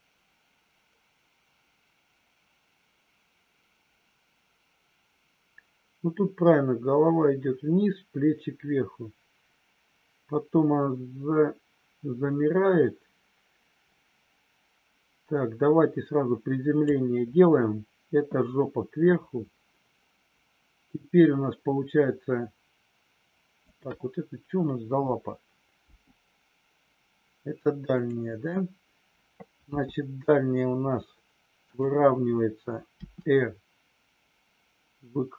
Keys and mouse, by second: 23.6 click, 29.6 g, 31.6 click, 32.8 r.